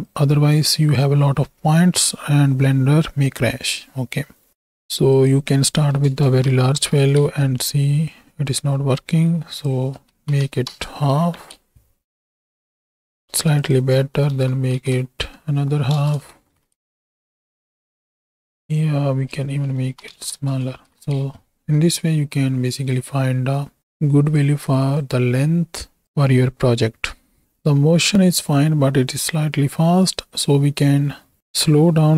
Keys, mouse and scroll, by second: 0.0 click, 5.2 click, 6.7 shift+Right, 6.8 shift+Left, 7.2 space, 8.6 space, 9.5-10.7 drag, 11.2 shift+Left, 11.5 space, 13.2 space, 13.6-16.0 drag, 16.3 shift+Right, 16.5 shift+Left, 16.7 space, 19.2-20.3 drag, 19.2 space, 20.7 shift+Right, 20.9 shift+Left, 21.1 space, 23.8 click, 25.2 click, 29.2-30.5 drag, 31.4 shift+a.